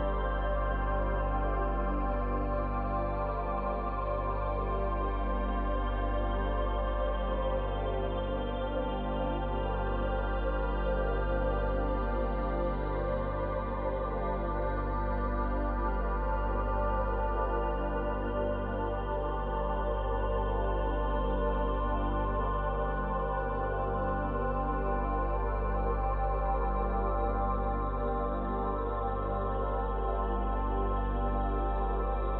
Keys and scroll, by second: 1.8 space, 29.8 space.